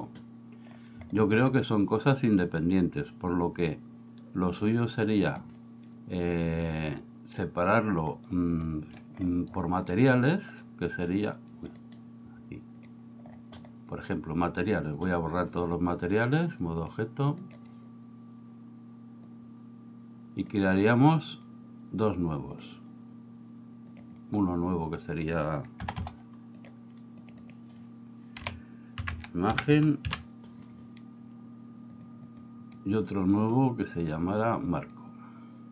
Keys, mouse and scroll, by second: 1.3 shift+middle click, 4.4 click, 8.7 shift+middle click, 11.9 right click, 15.1 click, 16.9-17.6 drag, 19.3 click, 24.0 click, 25.3 click, 25.9 3, 26.1 3, 26.6 click, 27.5-32.1 drag, 32.3 click, 33.5 click.